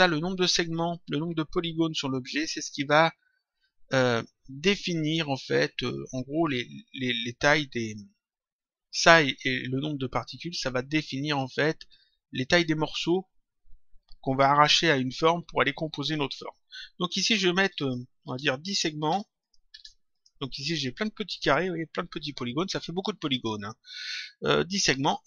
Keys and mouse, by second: 17.7 click.